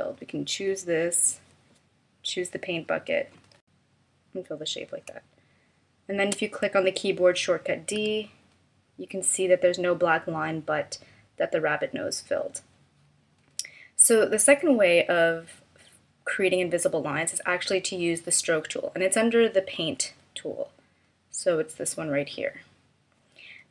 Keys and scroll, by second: 5.0 space, 8.0 d.